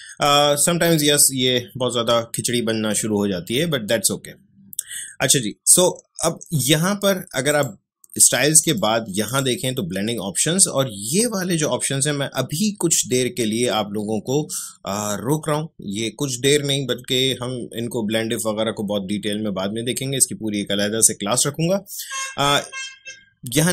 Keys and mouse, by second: 7.5 click.